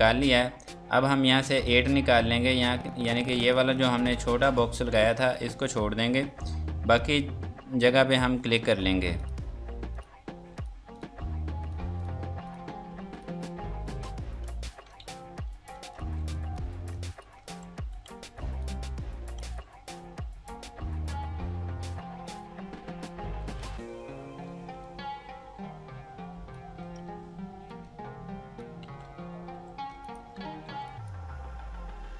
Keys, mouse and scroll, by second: 0.0-0.4 scroll up 1, 0.7-1.4 scroll down 1, 1.7-3.9 scroll up 1, 9.2 click, 14.4-14.9 scroll down 1, 15.5 space, 15.9 click, 16.2 F2, 16.3 click, 17.1 ctrl+click, 17.9 F2, 18.3 click, 19.2 F2, 19.4 click, 23.2 Up, 23.7 Down, 24.8 click, 27.7 click, 29.1 scroll down 1, 29.5 Escape, 30.0 click, 30.6 F2, 30.9 click, 31.8 scroll down 1.